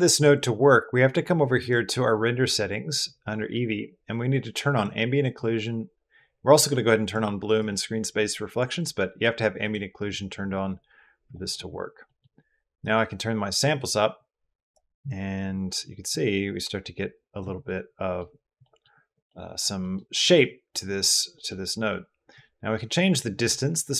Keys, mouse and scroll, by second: 4.6 middle click, 6.9 middle click, 7.4 middle click, 9.5 middle click, 11.1 middle click, 12.0 middle click, 12.7 middle click, 14.2 middle click, 15.9-17.2 middle drag, 17.5 middle click, 18.4 middle click, 19.1-19.4 middle drag, 19.6 middle drag, 20.2-20.9 middle drag, 21.2 middle drag, 22.2 middle click, 23.3 middle drag, 23.7-23.9 middle drag.